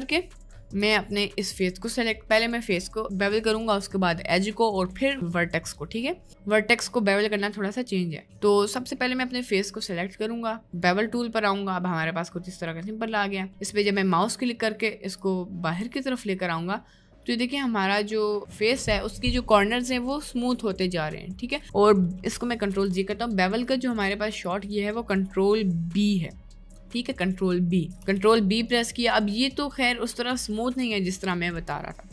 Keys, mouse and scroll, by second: 1.7 middle click, 8.6 click, 10.7 click, 11.9 middle click, 12.1 right click, 13.4-14.4 drag, 15.2 click, 15.4-22.1 drag, 22.7 ctrl+z, 24.3 click, 26.3 middle click, 26.9 middle click, 27.7 middle click, 28.2 ctrl+b.